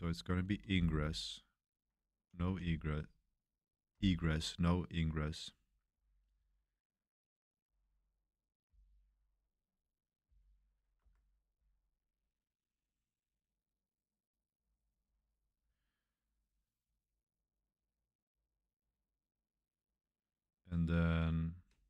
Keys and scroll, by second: 0.0-2.4 typing, 3.9-6.3 typing, 7.7 k, 8.6 k, 10.2 shift+v, 11.0 Escape, 11.5 j.